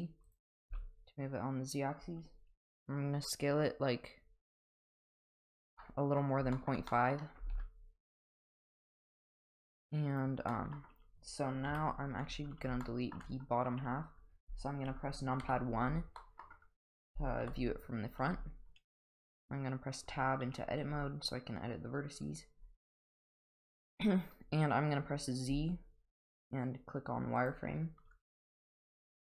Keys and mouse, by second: 0.7 s, 5.8-6.2 middle drag, 6.5 shift+middle drag, 6.9 middle click, 7.4 g, 10.5 middle click, 11.7 KP_1, 12.8-13.1 shift+middle drag, 14.9 KP_3, 15.4 KP_1, 16.2 middle drag, 17.4 KP_1, 20.1 Tab, 25.5 z, 29.1-29.2 drag.